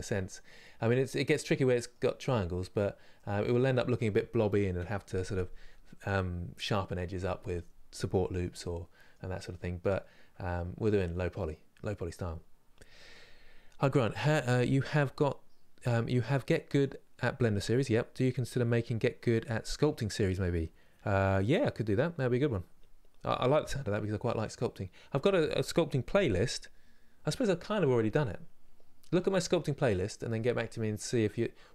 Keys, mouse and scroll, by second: 2.3-2.8 scroll up 2, 2.8-31.7 middle drag.